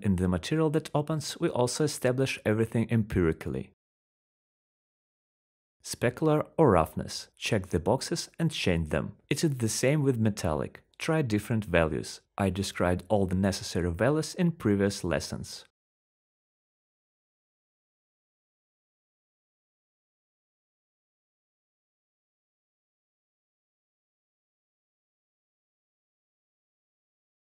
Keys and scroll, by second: 2.5-4.5 typing, 8.1-9.5 typing, 17.8-19.8 typing, 21.9-26.4 typing.